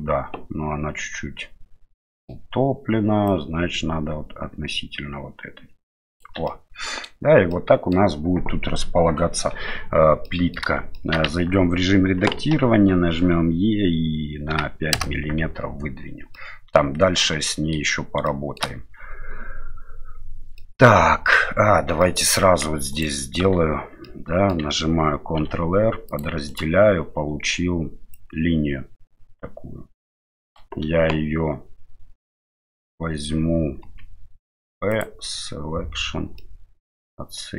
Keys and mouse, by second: 1.9 middle click, 3.2-6.2 drag, 6.5-7.0 middle drag, 7.5-7.9 middle drag, 10.2-10.5 middle drag, 10.9 shift+middle drag, 11.3 Tab, 12.5 e, 15.4 Tab, 16.3 middle click, 17.2-17.8 middle drag, 18.2-18.6 shift+middle drag, 20.6-21.3 middle drag, 22.0 shift+middle drag, 22.3 middle drag, 22.9 right click, 23.4 Tab, 24.0 middle click, 25.4 ctrl+r, 28.1-30.5 drag, 33.8 p, 36.4-37.5 middle drag.